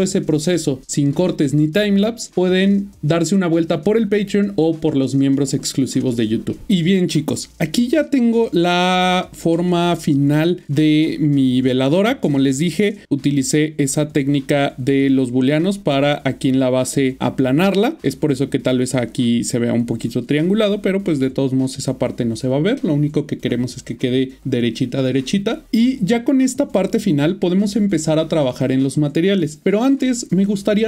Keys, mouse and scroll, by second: 7.6 middle click, 12.3 middle click, 13.0 shift+middle click, 15.5 middle click, 25.6 middle click, 27.1 middle click.